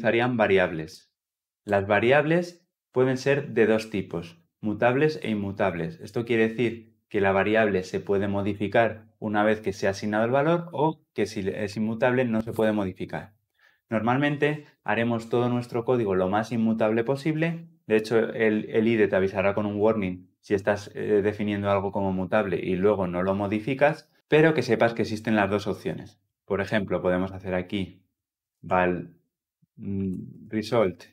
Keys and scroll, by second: 3.8 ctrl+z.